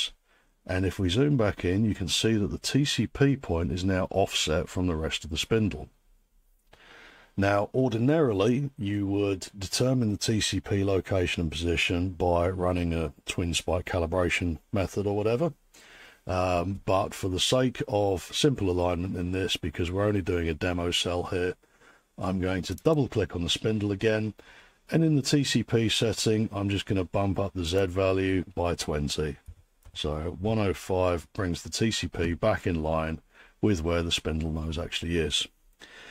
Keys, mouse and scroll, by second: 0.9-2.0 scroll, 22.8 click, 22.9 click, 27.8 click, 29.5-30.4 typing.